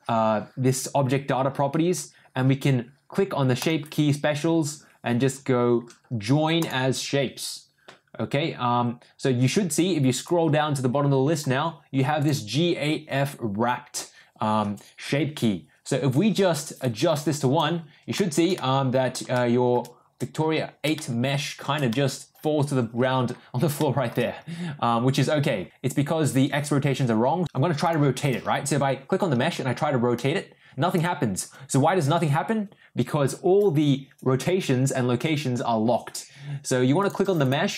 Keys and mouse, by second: 3.7-6.7 drag, 10.2-11.4 drag, 16.8 click, 18.1 shift+middle click, 18.6 middle click, 19.3 shift+middle click, 20.9-21.6 shift+middle drag, 21.8-23.2 middle drag, 23.7-24.1 shift+middle drag, 28.2 click, 29.5 r, 37.0 click.